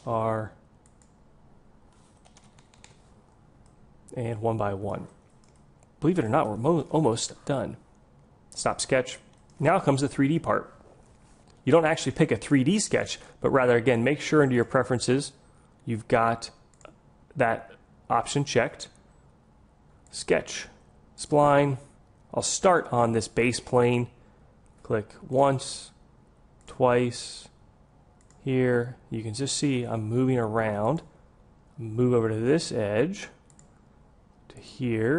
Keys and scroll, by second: 0.1 r.